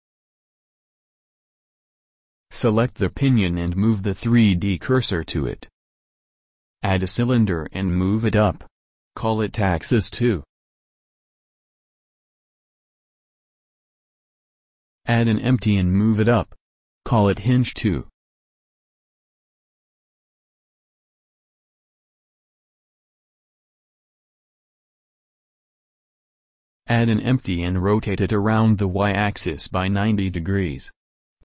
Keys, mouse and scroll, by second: 4.1 click, 4.9 shift+s, 5.8 shift+a, 9.2 s, 11.0 g, 12.7-14.1 drag, 15.6 shift+a, 19.4 s, 20.1 s, 21.2 g, 23.5-24.8 drag, 24.8 middle click, 27.5 shift+a, 28.8 s, 29.4 s, 30.2 s, 31.3 r.